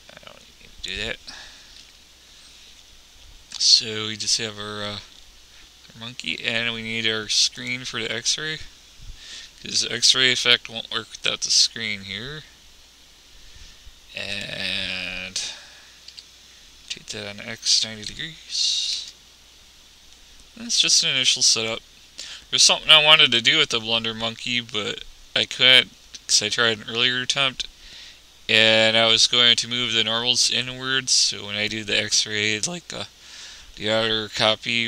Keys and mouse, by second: 2.0 n, 7.8-9.5 drag, 14.6-16.2 drag, 16.4 r, 20.6-22.0 middle drag, 22.0-23.6 drag.